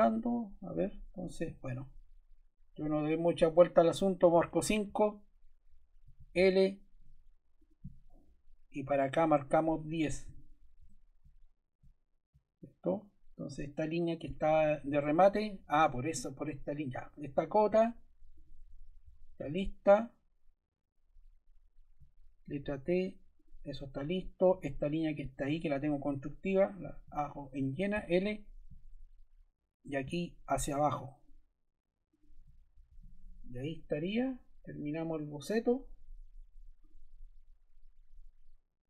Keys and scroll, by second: 4.1 5, 4.4 Return, 6.0 l, 9.9 1, 10.2 0, 10.7 Return, 12.8 Escape, 19.0 BackSpace, 22.4 t, 24.5 Escape, 27.9 l, 34.0 Escape.